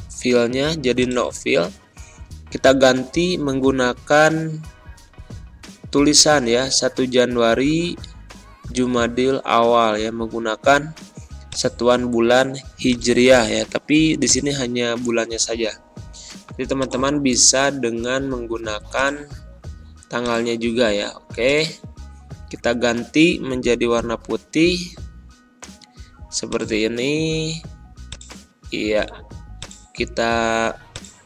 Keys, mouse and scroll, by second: 2.6 0, 4.0 shift+j, 11.4-12.8 drag, 13.2 ctrl+a, 14.2-16.7 drag, 17.1 ctrl+a, 18.8 click, 23.1 ctrl+[, 26.4-31.2 drag.